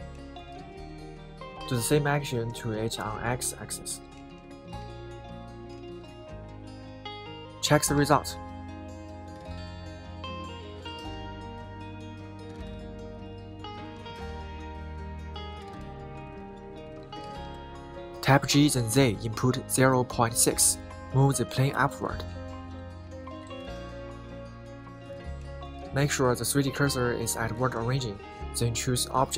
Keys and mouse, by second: 1.4 g, 1.6 x, 3.3 middle click, 4.6 click, 6.4 click, 6.6 middle click, 7.6 KP_1, 8.6 KP_7, 9.2 KP_3, 10.5 middle click, 11.0 middle click, 12.5 middle click, 13.2 middle click, 14.4 Tab, 14.8 middle click, 16.4 middle click, 18.1 KP_1, 21.7-22.8 typing, 23.2 Return, 24.0 shift+middle click, 25.2-25.9 middle drag, 26.4 middle click.